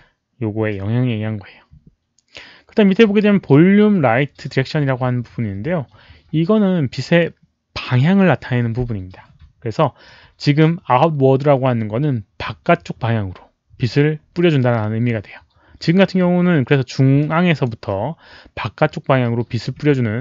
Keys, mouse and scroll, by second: 17.1 click, 19.8 z.